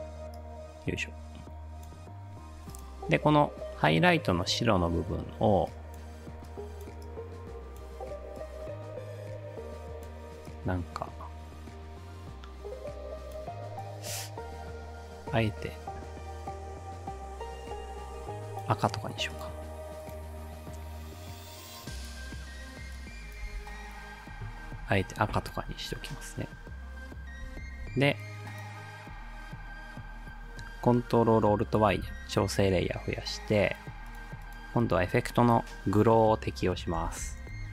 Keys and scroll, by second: 23.5 space, 25.7 space, 27.4 space, 31.9 ctrl+alt+y, 35.7-37.7 typing.